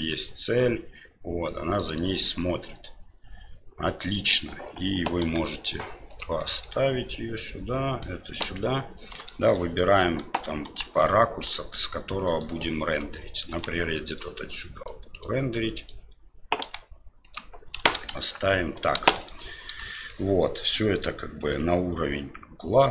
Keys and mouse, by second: 2.2-4.3 middle drag, 5.2 g, 6.4 middle click, 7.4 right click, 8.4 KP_7, 9.4 middle click, 10.6 g, 13.5 g, 14.8 right click, 15.7 right click, 16.6 g, 17.7 KP_1, 18.0 KP_3, 19.1 shift+z, 20.0 shift+middle click, 20.5 right click, 21.3-22.9 drag.